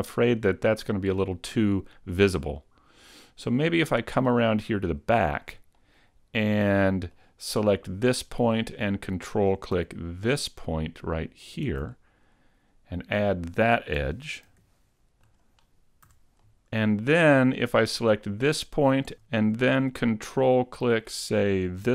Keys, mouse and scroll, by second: 0.2 scroll down 1, 2.6 middle click, 4.6-5.2 scroll up 1, 5.2 shift+middle click, 5.2 scroll up 1, 5.8 middle click, 8.1 right click, 8.4 middle click, 11.6 ctrl+right click, 12.0 middle click, 14.5 ctrl+e, 16.0 a, 16.4 middle click, 18.3 right click, 19.0 middle click, 19.2 super+z, 19.4 middle click.